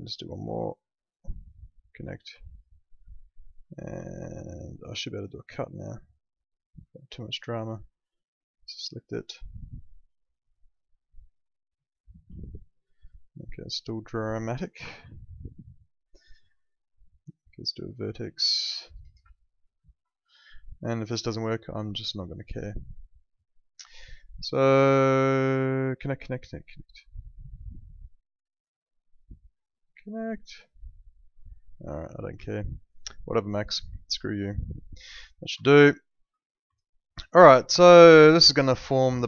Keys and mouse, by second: 1.0 ctrl+click, 2.4 alt+middle click, 4.1 alt+middle click, 5.6 click, 11.8 right click, 12.4 alt+middle click, 16.2 ctrl+z, 17.8 click, 19.7 ctrl+click, 23.8 click, 28.1 click, 31.4 alt+middle click, 32.5 alt+middle click, 33.3 click, 34.0 alt+middle click, 35.6 alt+middle click, 36.7 alt+middle click, 37.4 click, 37.7 alt+middle click.